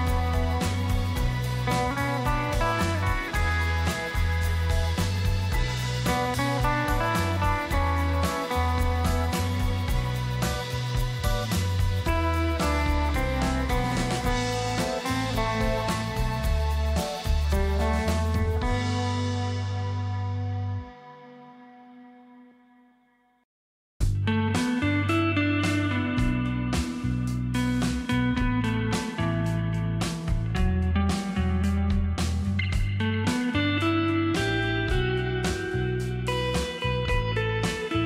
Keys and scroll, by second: 1.3 ctrl+shift+], 6.6 ctrl+shift+], 34.1 space.